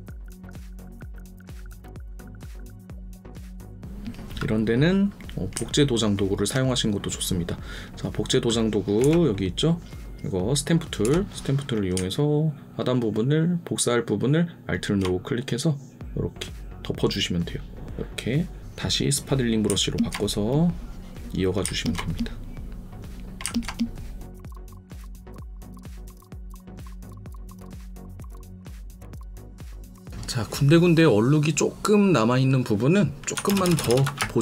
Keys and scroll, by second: 27.4 alt+space, 33.4 ctrl+KP_Add, 34.1 ctrl+space.